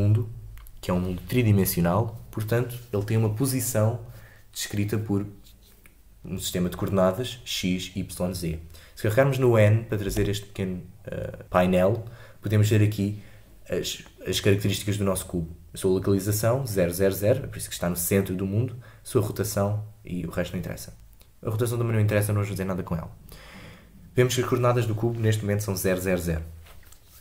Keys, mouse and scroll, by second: 10.0 n, 11.4 click.